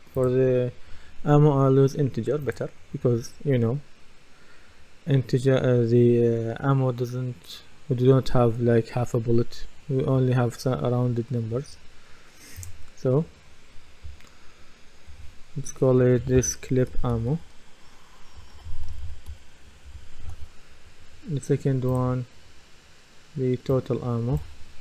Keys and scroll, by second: 14.0 BackSpace, 17.1-19.8 typing, 20.2 Return.